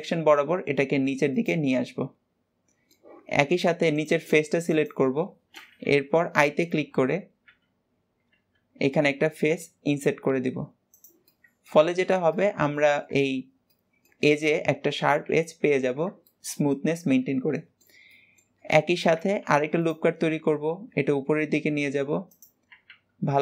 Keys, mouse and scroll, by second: 1.7-3.9 middle drag, 3.9 click, 4.7 click, 5.2-7.5 middle drag, 7.5 o, 11.3 middle click, 11.8 Tab, 12.1 shift+middle click, 12.5 scroll up 1, 12.7-15.6 middle drag, 15.6-16.2 scroll down 2, 16.3-17.3 shift+middle drag, 17.3 Tab, 17.6-19.5 middle drag, 19.5 ctrl+r.